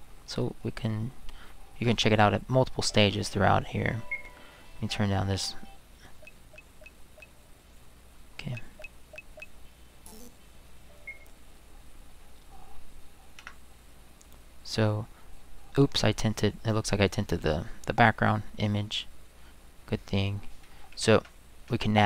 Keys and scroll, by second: 13.4 Escape, 21.1 Right, 21.7 Right.